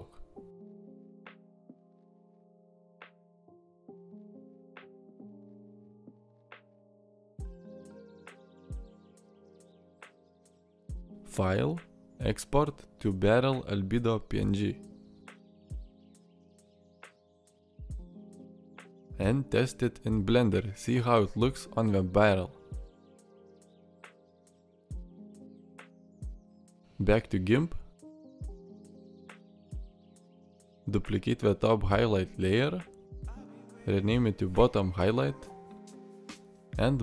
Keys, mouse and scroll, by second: 17.9 alt+r, 23.4-26.2 middle drag.